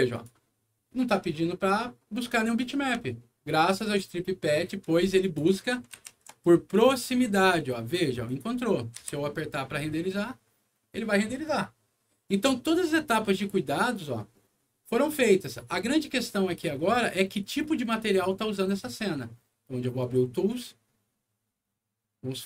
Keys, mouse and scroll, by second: 0.1 click, 2.2 click, 3.1 alt+middle click, 5.2 alt+click, 5.9 shift+t, 8.2 shift+click, 8.9 F9, 16.3 click, 18.1 click, 20.0 click.